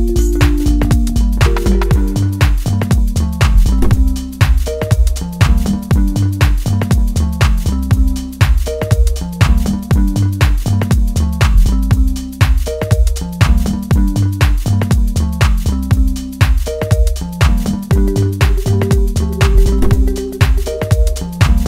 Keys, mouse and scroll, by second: 11.7-13.4 drag, 17.1-19.8 right drag, 19.8 click, 21.1 right click.